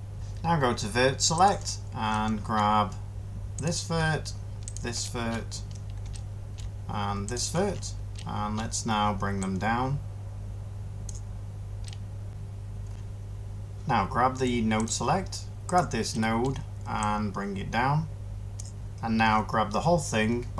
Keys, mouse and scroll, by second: 12.3 ctrl+z.